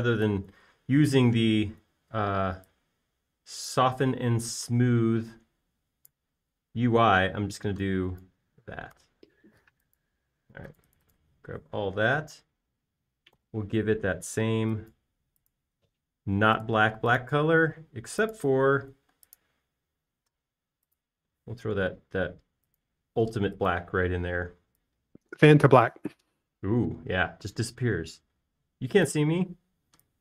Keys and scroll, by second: 8.2 space, 10.4 BackSpace, 15.0 b, 20.7 space, 23.0 b, 24.6 typing.